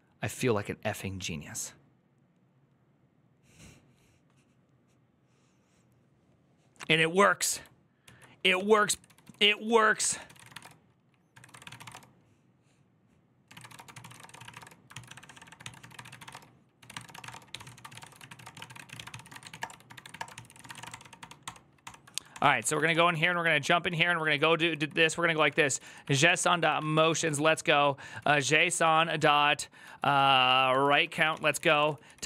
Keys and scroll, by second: 7.9 alt+{, 8.3 ctrl+c, 8.5-20.9 typing, 21.2 ctrl+d, 22.3-32.2 typing.